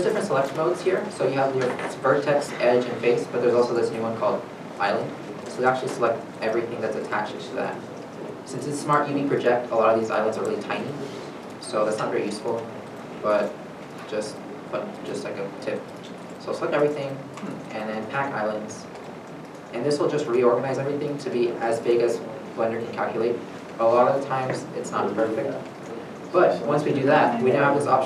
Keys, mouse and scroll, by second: 6.7-8.2 scroll up 1, 8.2-8.7 scroll down 1, 10.0 scroll down 1, 10.2 shift+middle click, 10.7 scroll down 1, 12.2 shift+middle click, 13.2 shift+middle click, 13.9 a, 14.9 shift+middle click, 16.3 shift+scroll, 16.4 shift+middle click.